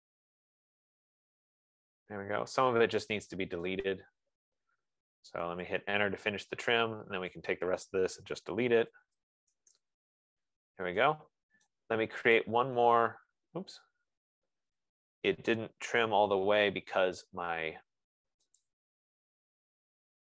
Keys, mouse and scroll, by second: 3.9 click, 5.7 Return, 7.7 click, 9.0-10.1 typing, 12.2 right click, 12.7 click, 16.7 ctrl+z, 18.4 scroll down 4, 19.2 click, 20.2-20.3 typing.